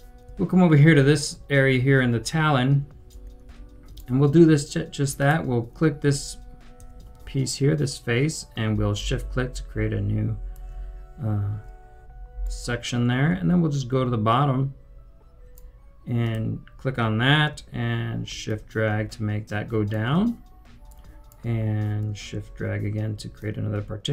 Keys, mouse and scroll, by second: 0.0-0.3 typing, 1.3-1.9 typing, 3.2-4.6 typing, 8.9 shift+click, 12.4 right click, 12.7-14.6 typing, 18.4 typing, 18.4 shift+click, 20.8 right click, 23.5 shift+click.